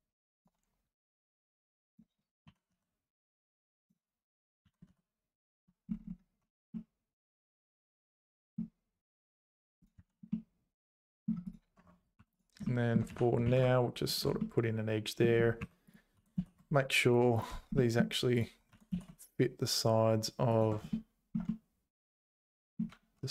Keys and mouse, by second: 1.2 click, 2.4 r, 4.4 click, 4.6 g, 6.4 Tab, 6.7 middle click, 6.9-8.3 middle drag, 9.1 z, 10.0 h, 10.3 middle click, 11.8 Tab, 12.2 2, 12.7 shift+middle click, 13.1 e, 14.5 middle click, 15.6 3, 16.2 g, 17.9 middle click, 18.3 click, 18.7 g, 21.1 middle click, 21.6 middle click, 22.6 click.